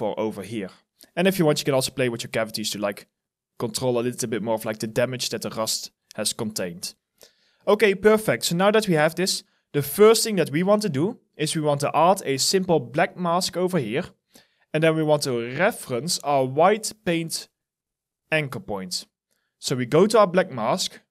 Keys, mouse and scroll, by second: 0.4 scroll down 1, 5.1 alt+middle click, 5.5 alt+right click, 6.0 alt+middle click.